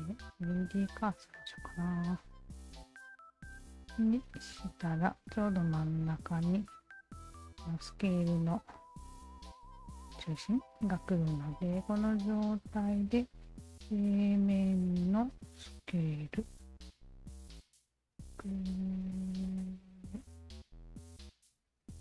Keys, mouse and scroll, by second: 0.5 alt+click, 1.4-6.4 alt+drag, 7.0 alt+right click, 7.9-10.1 alt+drag, 10.5 alt+right click, 10.7 alt+right click, 10.9 alt+right click, 11.4 alt+right click, 12.0 alt+click, 12.4 alt+middle click, 14.2 alt+click, 15.9-20.7 alt+drag, 21.3 ctrl+z.